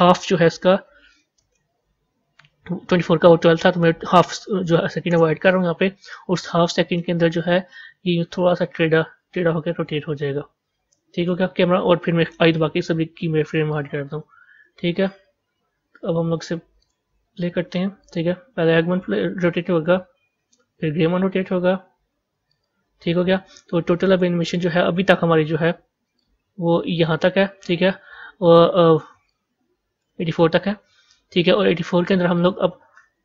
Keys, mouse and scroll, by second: 7.3-10.4 drag, 12.3 i, 13.6-16.6 drag, 16.7 click, 17.9 click, 22.4-24.4 drag, 26.1-29.1 drag, 29.2-33.2 drag.